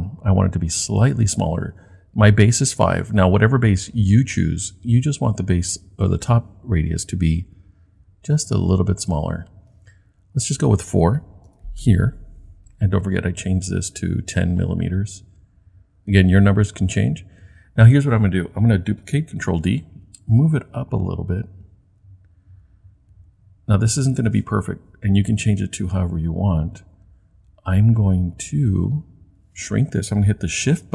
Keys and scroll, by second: 19.5 super+d.